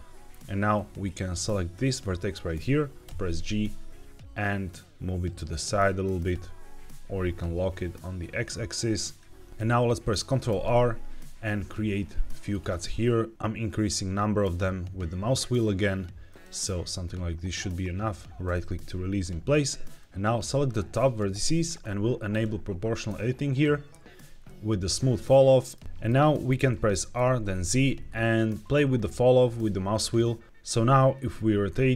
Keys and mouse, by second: 0.7 click, 2.9 g, 6.3 x, 8.9 click, 10.4 ctrl+r, 18.3-20.0 right drag, 20.0 click, 22.2 click, 24.3-25.6 middle drag, 25.8 middle click, 25.8 KP_1, 26.6 middle click, 27.1 r, 27.4 z.